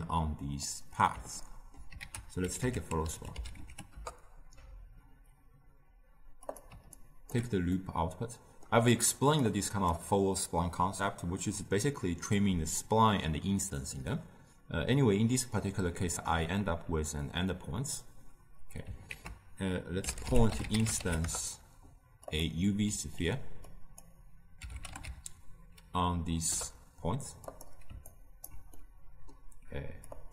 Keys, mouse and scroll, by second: 3.9 l, 7.3-21.2 alt+right drag, 21.2 ctrl+a, 23.9-28.4 drag, 28.4-30.3 alt+right drag.